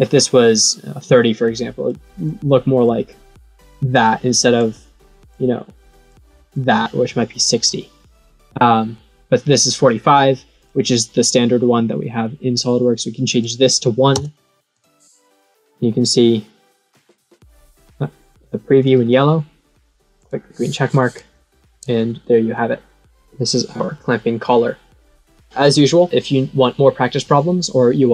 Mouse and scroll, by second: 1.8 click, 2.7-3.9 drag, 4.5 click, 6.0 click, 10.5 click, 12.5 click, 14.7 click, 15.8-18.9 middle drag, 20.1 click.